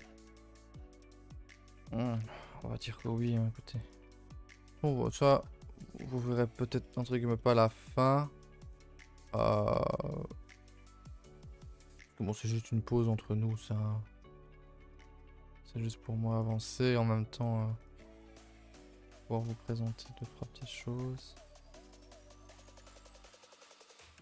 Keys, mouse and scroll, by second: 0.0 a, 0.1 a, 0.5-1.0 middle drag, 1.0 Tab, 1.3 g, 2.2 Tab, 2.4 middle click, 2.5 a, 2.7 a, 2.8 middle click, 3.3-3.9 scroll up 2, 3.9 click, 4.2-4.8 shift+middle drag, 4.8 Tab, 4.9-5.5 middle drag, 5.5-6.3 scroll up 1, 6.3 click, 6.6 click, 6.8 shift+middle drag, 7.1 scroll down 1, 7.4 middle drag, 7.6-8.2 scroll up 1, 8.6 click, 9.5 click, 9.8 g, 11.6 click, 12.0 g, 13.9 middle click, 14.8 scroll up 2, 15.0 shift+middle click, 15.4 scroll up 1, 15.6 middle click, 16.0 g, 16.6 middle click, 17.4 click, 17.6 g, 18.2 click, 18.4 middle click, 19.0 click, 19.2 g, 20.2 click, 20.3 g, 21.0 click, 21.0 g, 22.8 click, 22.8 g.